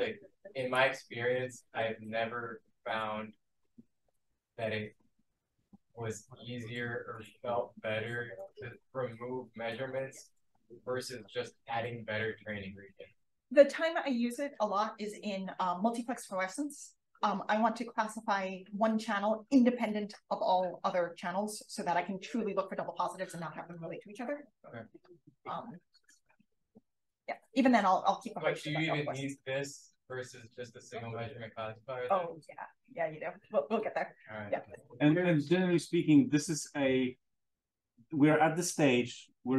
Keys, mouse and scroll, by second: 35.9 click, 36.3-37.4 typing.